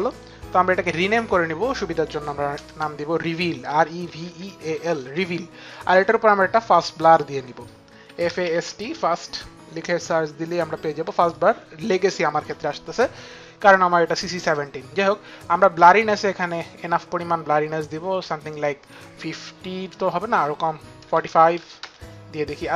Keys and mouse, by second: 0.3 click, 2.2 Return, 2.9-5.1 typing, 12.3 click, 12.3 t, 18.4 click, 20.7 click, 20.7 KP_5, 20.7 KP_4, 21.4 Return.